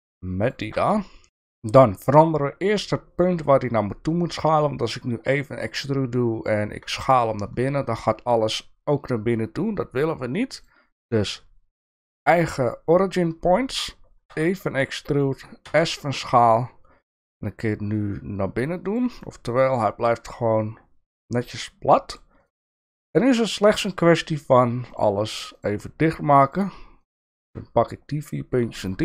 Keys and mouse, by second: 0.9 middle click, 10.7-12.3 drag, 14.3 e, 19.2 middle click, 21.4 middle click, 22.7 shift+middle click, 23.7 shift+middle click, 24.9 shift+click, 27.0 shift+click.